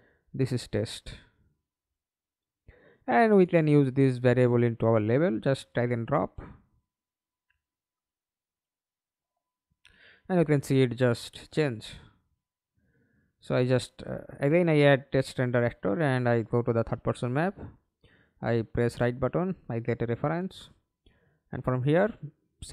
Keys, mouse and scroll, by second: 3.4 double click, 5.4 middle click, 5.9 ctrl+space, 12.2 Delete, 17.6 right click, 19.3-20.4 scroll up 2, 20.2-22.6 typing.